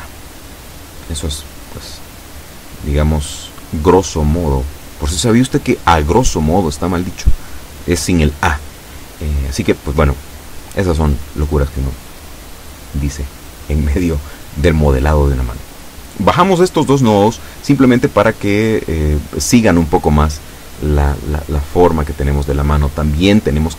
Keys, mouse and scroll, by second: 1.2-4.2 middle drag, 5.0 KP_7, 6.3-6.6 scroll up 1, 6.9 shift+middle click, 7.9 shift+middle click, 11.6 a, 12.7 b, 13.3 click, 14.3-15.8 drag, 16.4-18.0 drag, 20.3-20.9 scroll down 1, 22.3-23.7 middle drag.